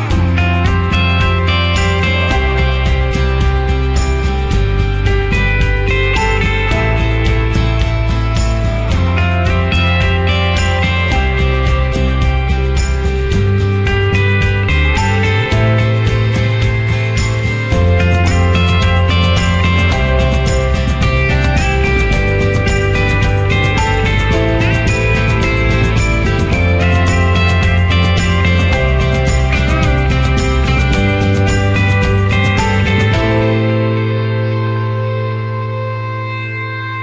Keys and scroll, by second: 11.0 ctrl+z, 20.6 ctrl+z, 21.7 ctrl+alt+z, 31.0 ctrl+z, 32.4 ctrl+alt+z, 35.2 ctrl+0.